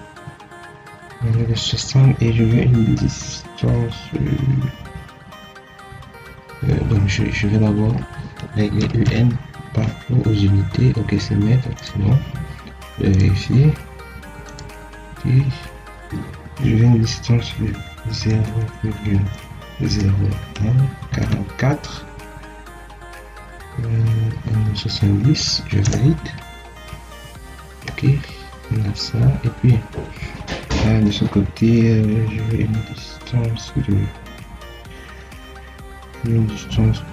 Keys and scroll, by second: 6.6 Escape, 8.1 Escape, 18.2 0, 18.7 ., 19.8 0, 25.7 Return.